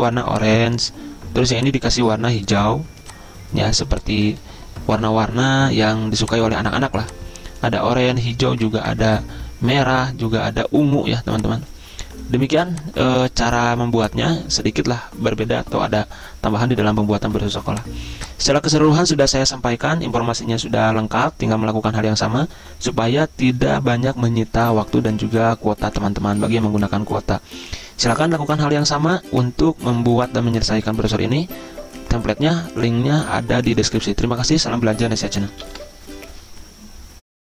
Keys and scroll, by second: 36.0 ctrl+End.